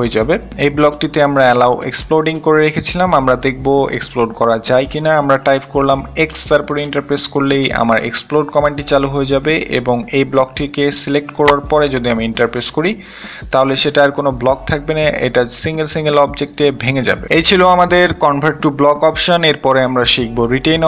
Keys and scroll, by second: 5.5 x, 5.7 Return.